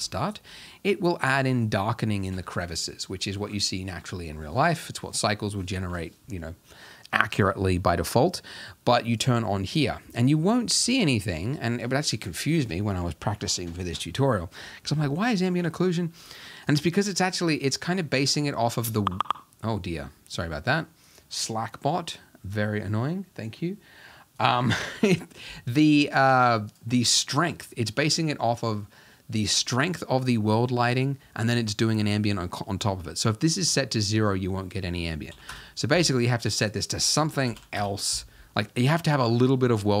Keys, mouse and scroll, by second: 0.6-1.1 scroll up 1, 1.1-2.6 scroll down 1, 2.6-3.8 scroll down 1, 3.8-4.9 scroll down 1, 4.9-6.4 scroll down 1, 9.7 click, 35.6 click, 37.7-38.9 drag, 38.9-39.5 scroll down 2, 39.5-40.0 middle drag.